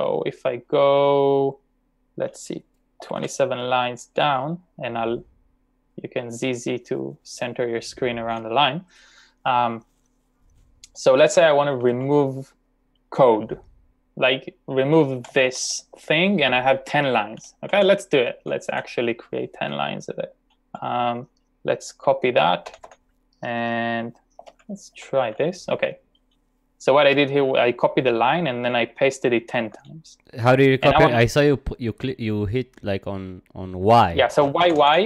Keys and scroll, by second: 2.8-4.7 typing, 7.2 k, 11.8 typing, 15.0-16.1 typing, 17.4-19.6 typing, 20.6 v, 22.7 typing, 24.3-25.0 typing, 34.8 typing.